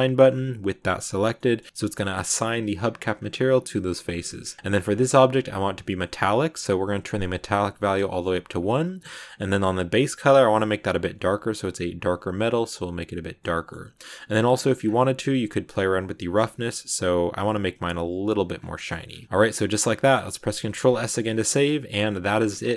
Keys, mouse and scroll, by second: 0.2-1.2 drag, 1.2 middle click, 1.7 scroll up 2, 1.9-3.0 middle drag, 3.0 scroll up 1, 4.3-5.4 scroll down 10, 5.4-6.6 drag, 6.6-8.0 scroll down 3, 8.0-9.1 shift+middle drag, 9.1 click, 13.3 middle click, 13.9-14.4 scroll up 1, 14.4 scroll down 1, 15.8-18.4 drag, 18.4 scroll up 1, 18.5 scroll down 3, 18.6 middle click, 18.9 a, 19.1-20.5 middle drag, 20.5 ctrl+s, 20.8 scroll down 2, 20.9 shift+middle click, 21.3 scroll up 1, 21.4-22.7 middle drag.